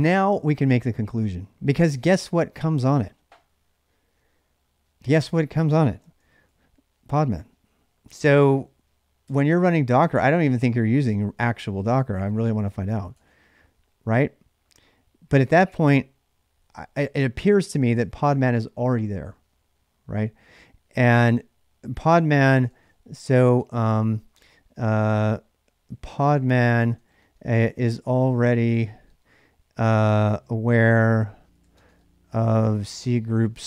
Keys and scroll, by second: 0.0-0.5 typing, 7.9 ctrl+[, 8.0 k, 9.0 Return, 11.3-13.1 typing, 21.8 ctrl+a, 22.4 ctrl+[, 22.5 ctrl+j, 22.6-24.1 typing, 25.5-33.6 typing.